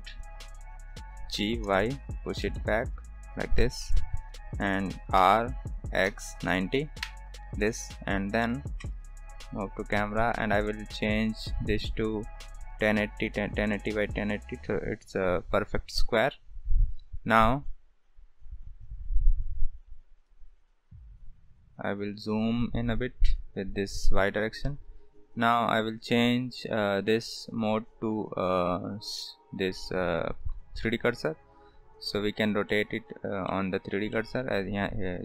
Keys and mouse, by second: 1.3 g, 2.5-2.9 shift+middle drag, 3.5 g, 5.1 r, 8.8 KP_0, 11.8 click, 19.5 click, 20.2-22.5 drag, 24.4 ctrl+s, 27.1-30.5 drag, 32.6 middle click, 33.4-33.8 middle drag, 34.2 shift+middle drag.